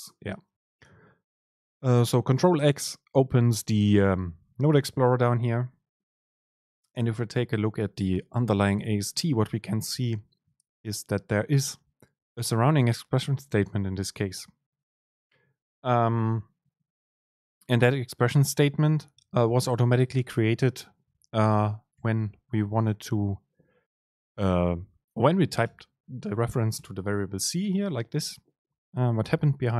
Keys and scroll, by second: 22.1 shift+Up, 25.7 BackSpace.